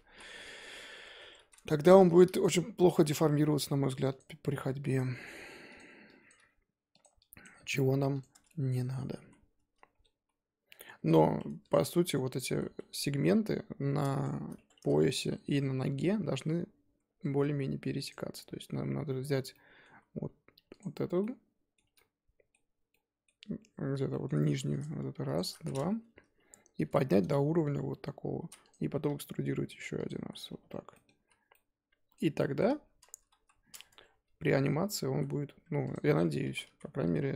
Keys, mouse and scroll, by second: 0.2 KP_1, 0.8 scroll up 4, 1.2 Tab, 1.5 z, 1.6 shift+middle click, 2.4 click, 2.8 g, 5.0 click, 5.2 g, 6.3 click, 6.3 g, 7.4 click, 7.6 g, 8.3 scroll down 1, 8.5 middle click, 9.2 z, 9.9-11.0 scroll up 1, 11.0 KP_1, 11.5 Tab, 11.7 click, 11.8 Tab, 12.5 z, 12.8 Tab, 14.3 shift+click, 14.5 Tab, 14.8 z, 16.6-16.9 scroll up 2, 16.9 z, 18.1 click, 19.5 middle click, 19.9 z, 20.8 alt+click, 21.2 middle click, 21.8 z, 21.9-24.5 middle drag, 24.8 click, 25.3 shift+click, 26.8 KP_1, 27.6 g, 29.0 e, 30.4 scroll down 3, 30.6 Tab, 30.9 middle click, 31.1 z, 31.5-32.8 middle drag, 32.8-33.4 scroll up 1, 33.4 KP_1, 33.9 Tab, 34.1 z, 35.1 z, 35.7 Tab, 35.9 click, 36.1 Tab, 36.4 1, 36.7 z.